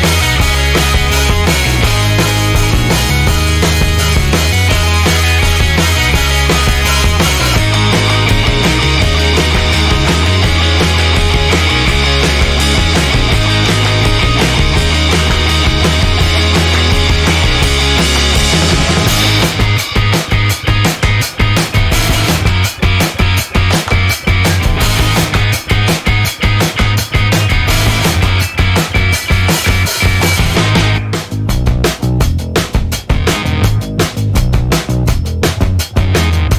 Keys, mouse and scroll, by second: 0.2 6, 0.9 2, 1.9 7, 4.0 click, 5.6 click, 6.7 4, 7.5 2, 8.4 click, 11.1 click, 12.1 0, 12.8 click, 13.3 1, 14.1 click, 18.5 click, 19.2-19.6 scroll down 1, 22.7 click, 23.3 click, 24.4 click, 25.9 click, 26.6 click, 30.1 click, 33.6 click, 35.2 click, 36.1 click.